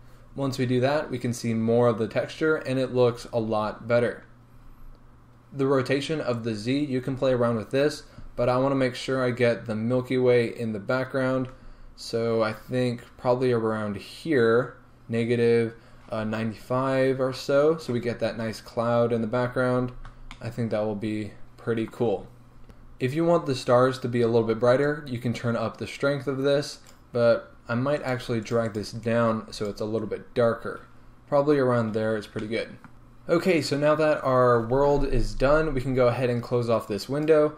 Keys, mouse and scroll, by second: 19.4-19.8 scroll down 2, 19.8-20.4 scroll up 2, 20.4-25.1 shift+middle drag, 25.1-27.0 drag, 28.2 click, 28.6-32.9 drag, 32.9-35.1 scroll down 1, 36.9-37.5 drag.